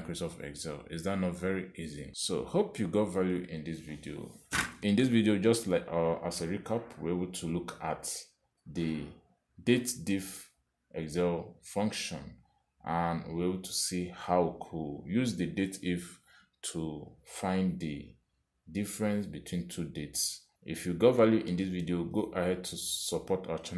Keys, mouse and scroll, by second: 1.2 click, 9.5 click, 14.1 click.